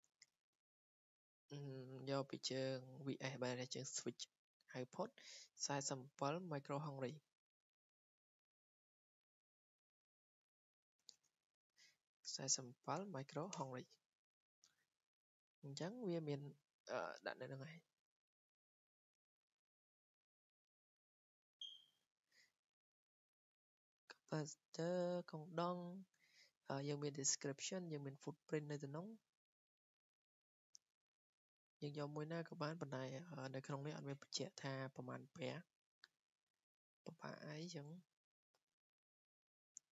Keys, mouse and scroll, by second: 7.1 click, 7.6 Escape, 8.4 click, 10.4 click, 11.5 ctrl+a, 12.0-13.3 typing, 13.6 Return, 15.7 click, 18.2 click, 19.5-20.1 scroll up 8, 20.2 scroll, 20.8 scroll down 8, 21.4 click, 22.4 click, 29.2 click, 29.4 click, 29.7 click, 30.1 click, 30.8 click, 32.0 click, 35.6 click, 36.2 scroll, 37.1 scroll, 37.6 click, 39.7 click.